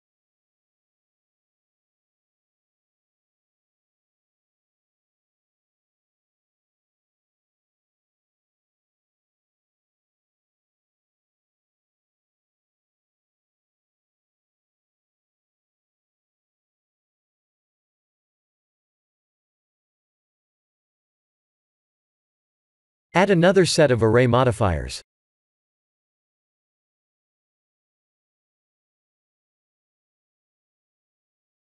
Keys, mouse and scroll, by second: 0.4 s, 1.8 s, 5.4 click, 7.6 click, 10.9 click, 14.6 middle click, 16.4 KP_7, 16.4 KP_4, 17.8 KP_7, 19.4 click, 21.8 middle click, 23.5 click, 30.8 click.